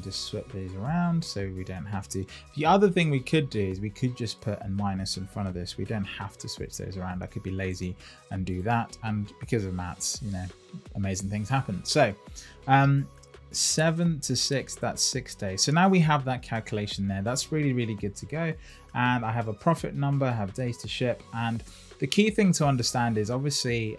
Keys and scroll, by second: 5.4 Left.